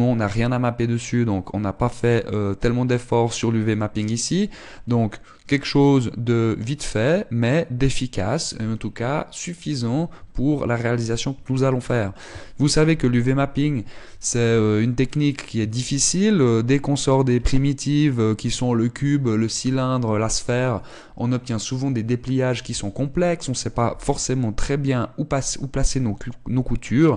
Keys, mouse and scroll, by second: 10.8 Tab, 15.8-16.2 scroll up 2, 16.3 shift+middle click, 17.9 middle click, 25.2 scroll up 2.